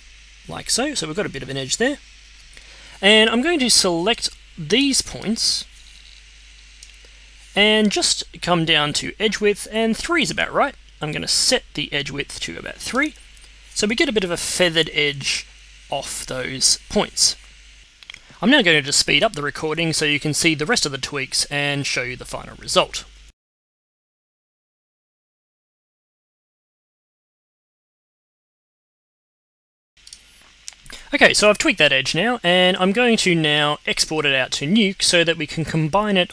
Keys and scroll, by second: 20.1 z, 21.8 space, 22.0 space, 22.5 space, 22.7 z, 24.5 z, 26.3-27.8 typing, 28.9 space.